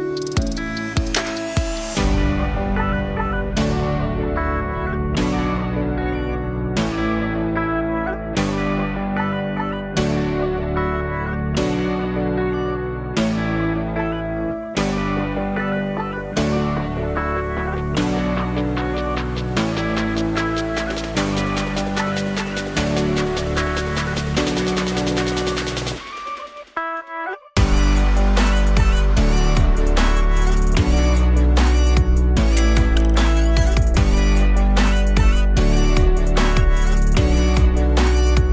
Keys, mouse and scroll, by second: 3.3-4.1 alt+drag, 4.1-5.7 scroll down 1, 5.7-7.4 scroll up 1, 7.4-8.5 scroll up 1, 8.5-9.8 scroll up 1, 9.8-12.0 drag, 13.5 middle click, 14.4 click, 15.1 click, 19.8-22.3 drag, 22.5-26.6 drag, 26.6 alt+middle click, 27.1-27.7 scroll up 1, 27.7-29.3 scroll up 1, 29.3-30.8 drag, 30.8-31.4 scroll up 1, 31.4-33.3 middle drag, 33.3-34.4 drag, 34.4 KP_0, 36.6-38.0 middle drag, 38.0-38.5 drag.